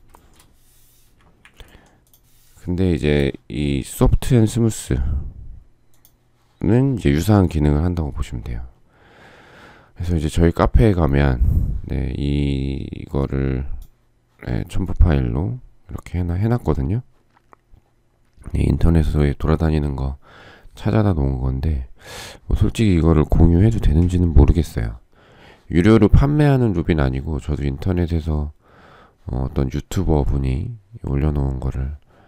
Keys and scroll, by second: 1.3 Delete.